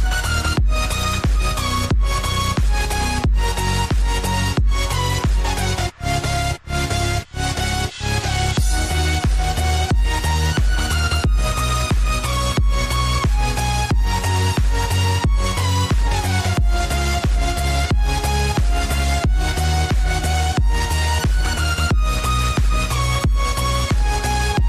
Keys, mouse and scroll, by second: 0.2 click, 0.6 Tab, 1.5 click, 2.8 click, 3.7 alt+click, 5.0 alt+shift+click, 7.0 ctrl+b, 13.3 Tab, 14.5 click, 15.4 Tab, 15.9 click, 17.5 click, 19.6 alt+click, 21.1 click, 23.2 ctrl+click, 23.8 click, 24.6 click.